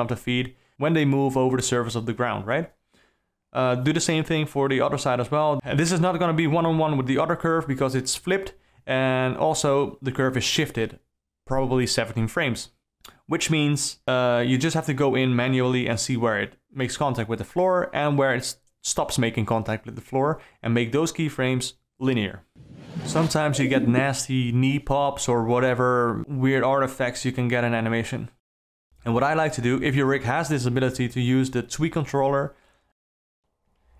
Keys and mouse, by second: 1.0 click, 2.2 s, 3.1 alt+a, 3.3 click, 5.2 shift+click, 6.6 shift+click, 11.9 alt+a, 13.2 x, 15.2 space, 19.3 shift+Left, 19.6 space, 28.1 click.